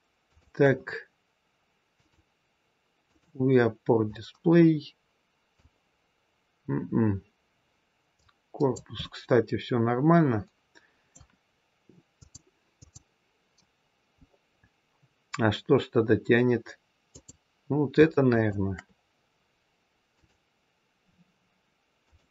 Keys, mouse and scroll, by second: 0.1 shift+click, 1.9 click, 4.1 click, 8.1 click, 8.9 middle click, 14.1-14.9 scroll up 2, 17.0 click, 18.2 shift+click, 20.1 click.